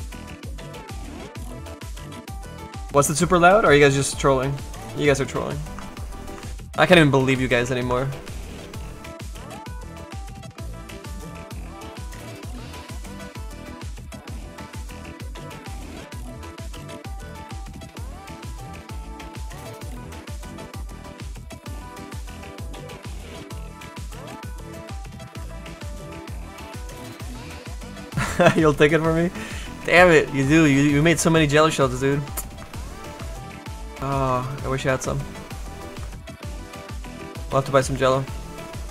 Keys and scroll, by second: 34.9 s.